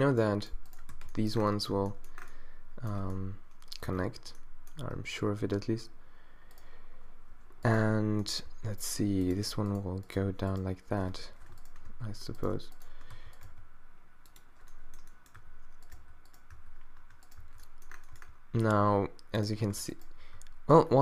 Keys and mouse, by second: 0.9 f, 1.8 a, 3.0 Tab, 3.9 Tab, 4.9 ctrl+r, 8.5 e, 11.2 z, 11.9 f, 13.1 f, 13.5 g, 14.7 middle click, 15.4 q, 15.9 middle click, 16.0 q, 16.6 q, 17.4 q, 18.7 g, 20.9 middle click.